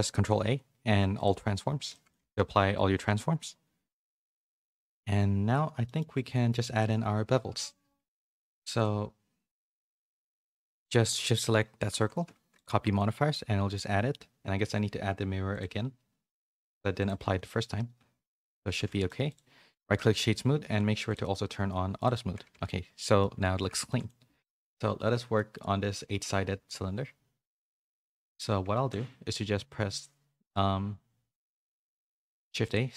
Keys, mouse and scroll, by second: 0.2 ctrl+a, 1.9 shift+middle click, 2.1 a, 2.3 a, 2.4 middle click, 5.8 middle click, 8.7 click, 9.9 shift+click, 11.7 ctrl+l, 12.9 middle click, 15.5-17.0 drag, 18.7 a, 18.8 middle click, 19.2 click, 19.7 right click, 21.9 click, 22.5 a, 22.6 middle click, 23.5 a, 23.9 middle click, 24.5 middle click, 25.4 middle click, 27.3 click, 27.6 shift+a, 28.2 click.